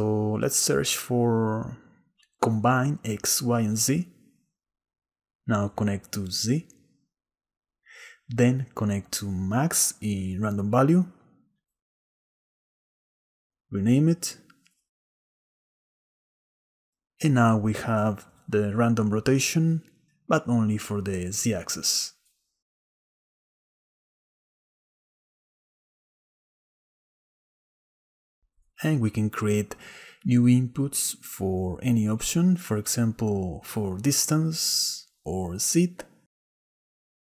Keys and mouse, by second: 0.5 shift+a, 7.4-9.1 drag, 10.4-12.1 drag, 14.0-16.5 drag, 14.9 s, 18.5-20.9 drag, 23.5-26.7 drag, 30.4 click, 30.4-36.1 right drag.